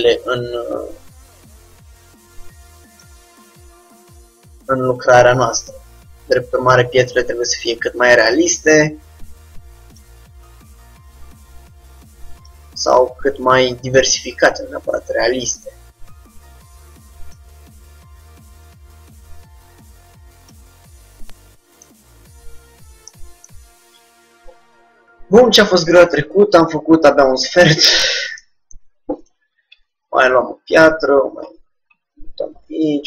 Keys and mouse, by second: 3.6 middle click, 5.7 Tab, 8.7 r, 10.3 g, 14.5 r, 15.8 s, 17.8 g, 21.1 middle click, 21.5-29.5 middle drag, 29.5-31.1 drag, 29.9 shift+d, 32.4 middle click, 32.4 r.